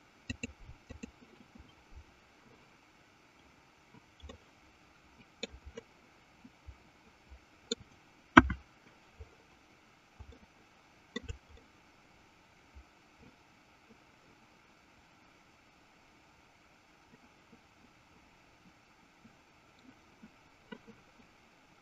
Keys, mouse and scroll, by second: 0.3-2.1 drag, 4.5-5.8 middle drag, 6.0-7.9 middle drag, 8.5 KP_1, 10.5 shift+middle click, 11.6-20.0 middle drag.